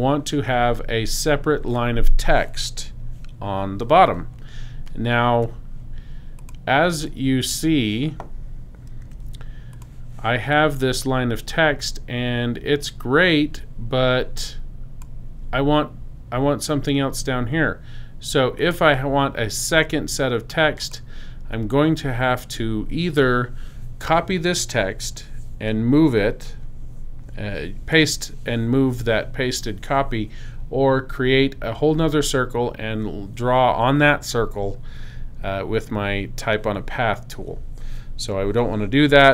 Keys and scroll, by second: 9.0 t.